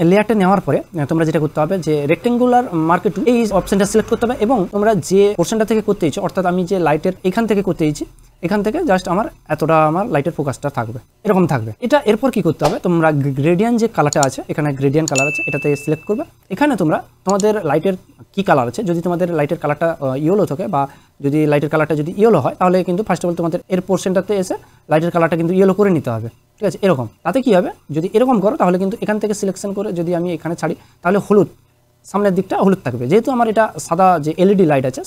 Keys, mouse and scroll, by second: 3.2 right click, 3.5-11.1 drag, 11.1 Up, 15.3 click, 19.4 click, 23.6 click, 27.9 click, 27.9-30.5 drag.